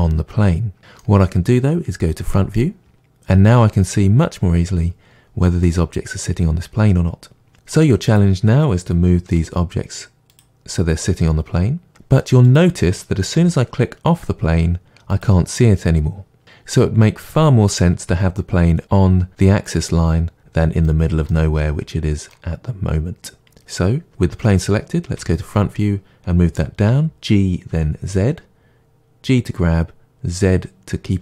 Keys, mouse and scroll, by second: 2.1 KP_1, 7.3 middle click, 7.5-8.0 scroll up 2, 8.0 click, 9.2 g, 12.4 click, 13.3 g, 15.2 click, 20.8-24.1 middle drag, 21.9-22.3 scroll down 2, 24.1 click, 25.1 KP_1, 26.9 g.